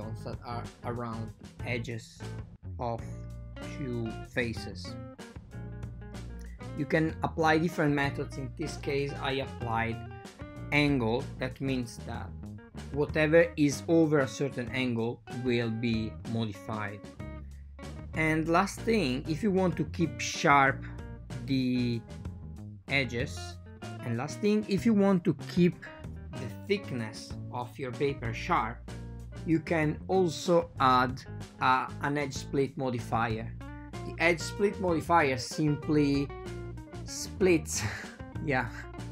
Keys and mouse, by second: 1.0 click, 12.8 click, 13.9 click, 14.6 drag, 18.5 f, 18.9 f, 26.1-27.3 drag, 28.4 click, 31.4 click, 38.1-39.1 drag.